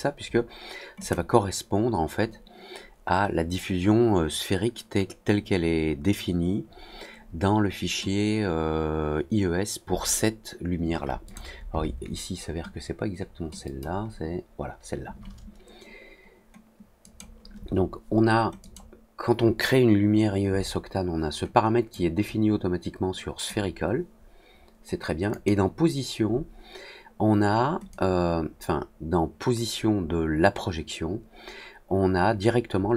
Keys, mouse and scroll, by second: 0.9 click, 11.2 click, 13.6 click, 17.0 click, 18.5 click, 21.8-23.4 drag, 25.2 click, 27.8-32.9 drag.